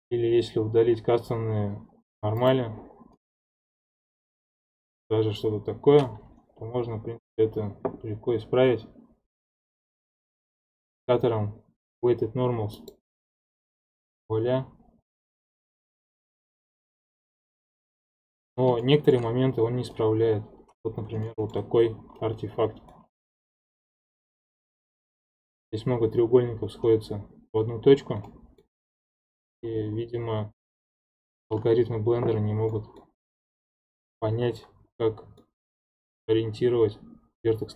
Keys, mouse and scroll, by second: 0.3-1.8 scroll down 3, 2.4-3.1 drag, 3.1-6.2 middle drag, 9.6 click, 10.5-13.7 drag, 16.9-18.8 drag, 18.8-19.4 shift+middle drag, 19.4-19.9 scroll up 2, 19.9-21.0 middle drag, 21.0 scroll up 2, 21.2-23.4 shift+middle drag, 23.4 ctrl+Tab, 24.3-25.4 shift+middle drag, 25.4 click, 25.8-27.9 scroll up 1, 27.9-28.3 scroll down 2, 28.3-33.6 middle drag, 33.6-35.0 scroll up 1, 35.0-37.7 middle drag.